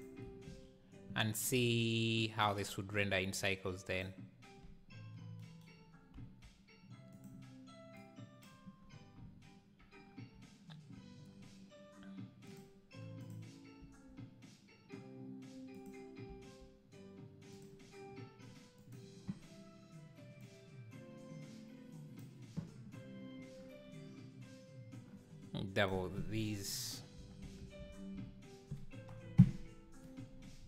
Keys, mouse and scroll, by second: 0.0 shift+right click, 0.3 shift+s, 1.6 g, 6.2 s, 8.0 click, 8.8 scroll down 2, 12.7 click, 13.3 click, 14.0 g, 17.3 s, 20.6-29.6 drag, 29.6 KP_0.